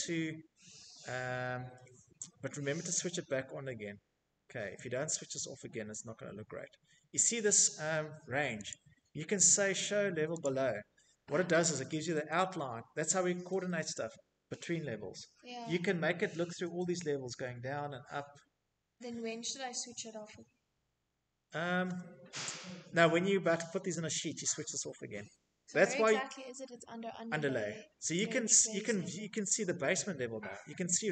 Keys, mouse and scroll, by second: 0.2 middle click, 0.4 middle click, 1.4 middle click, 2.8 middle click, 3.0 middle click, 3.3 middle click, 3.4 middle click, 3.6 middle click, 3.8 scroll, 4.8-5.5 scroll, 7.3 click, 9.0 click, 10.0 scroll, 10.7-11.4 scroll, 10.9 Escape, 12.4 middle click, 12.5 middle click, 12.6 middle click, 16.6-17.6 middle drag, 18.1 middle click, 18.3 Escape, 20.3 Escape, 20.4 middle click, 20.4 middle click, 20.6 middle click, 21.0 middle click, 21.1 middle click, 22.1 middle click, 22.2 middle click, 22.9 middle click, 23.1 middle click, 23.4 middle click, 23.6 middle click, 24.0 middle click, 24.1 middle click, 26.7 click, 28.0 click, 29.1 middle click, 29.2 middle click.